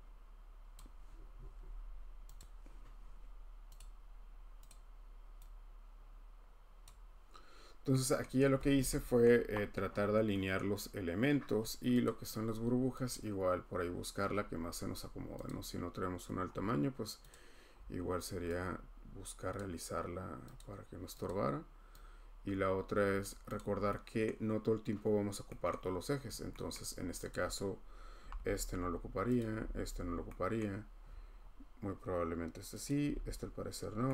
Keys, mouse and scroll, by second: 0.7 click, 2.4 click, 3.8 click, 4.7 click, 6.8 click, 8.2-8.8 scroll, 9.2 middle click, 9.9 middle click, 10.0 middle click, 10.6 middle click, 10.6 scroll, 12.0 click, 13.1 click, 15.5 click, 16.4 scroll, 17.3 click, 17.8 scroll, 19.5 click, 20.6 click, 21.3 click, 23.2 click, 23.6 click, 23.8-24.3 scroll, 25.7-26.0 scroll, 27.3 click, 27.3-27.7 scroll, 28.2 h, 28.3 h, 29.4 click, 29.5 h, 29.7 h, 30.6-32.8 scroll, 32.9 click, 33.0 h, 33.2 h, 33.7 scroll.